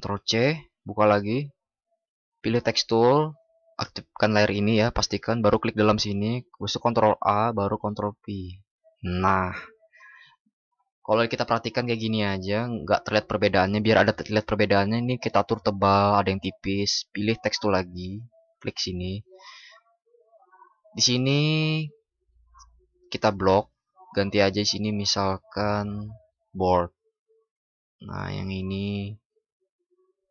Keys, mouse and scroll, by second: 6.6 ctrl+shift+@.